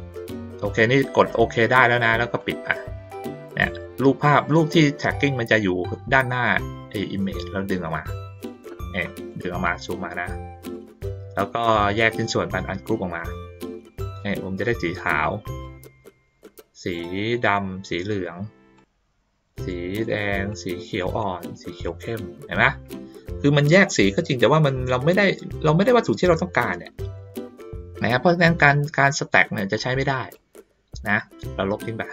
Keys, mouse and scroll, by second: 2.4 click, 3.4-8.4 drag, 8.9 middle click, 10.3 ctrl+middle click, 10.7 middle click, 12.5 click, 13.2 click, 14.0-14.7 drag, 15.6 click, 16.9-17.5 drag, 18.7-19.4 drag, 20.5-21.2 drag, 21.8-23.5 drag, 29.4 middle click, 30.3-31.2 drag, 31.7 right click.